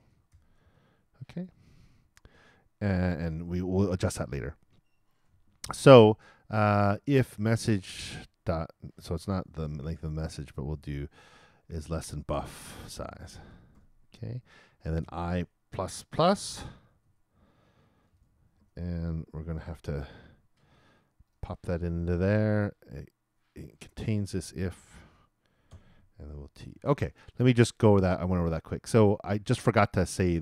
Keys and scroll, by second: 15.3 shift+|, 15.9 shift+_, 16.4 shift+BackSpace, 16.8 shift+=, 17.9 shift+0, 19.6 shift+[, 24.7 shift+Return, 25.7 shift+], 26.4 shift+super+t, 26.9 super+t.